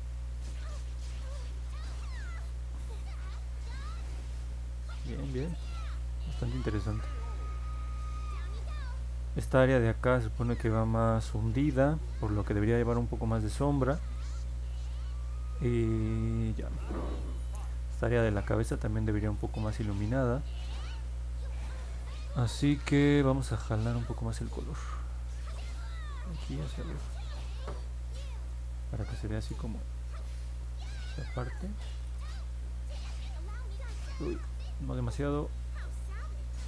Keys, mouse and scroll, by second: 0.0 click, 0.6 click, 1.0 click, 1.4 click, 1.8 click, 2.2 click, 2.9-4.1 drag, 4.7 click, 5.3 click, 6.6 middle click, 7.7 alt+middle click, 26.2 click, 26.9 click, 27.7 click, 28.1 click, 28.4 click, 28.8 click, 29.3 click, 29.9 click, 30.6 click, 31.9 click, 32.5 click, 33.0 click, 34.2 ctrl+z, 35.5 click, 36.2 click.